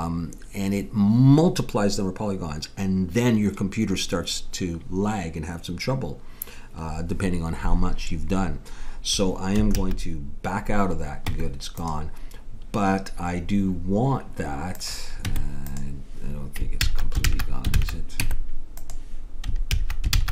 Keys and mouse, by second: 9.7 ctrl+z, 11.3 Tab, 14.7-15.8 drag, 15.3 Tab, 16.8 ctrl+z, 17.2 ctrl+z, 17.8 ctrl+z, 18.2 Tab, 19.7 ctrl+z, 20.2 ctrl+z.